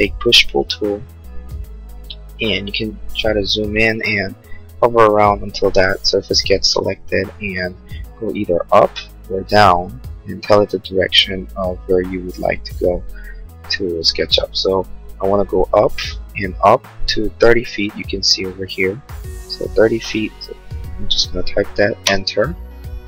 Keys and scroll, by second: 19.6-20.7 typing, 21.3 Return.